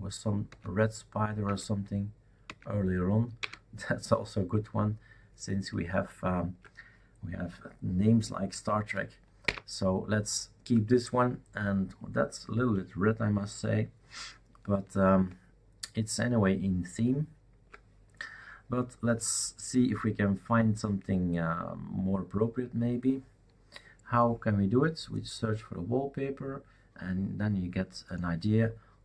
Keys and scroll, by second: 0.5 alt+Right, 1.4 alt+Right, 2.4 alt+Right, 3.4 alt+Left, 9.4 alt+Up.